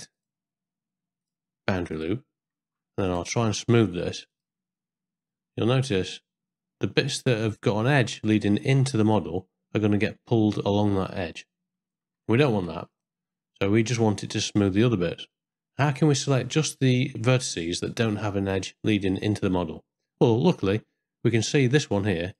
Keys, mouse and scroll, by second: 3.0-4.4 right drag, 6.1-7.1 drag, 12.8 ctrl+z, 14.1 middle click, 15.3 middle click, 15.9 shift+middle click, 16.5 ctrl+middle click, 19.2-20.7 middle drag, 21.0 ctrl+middle click.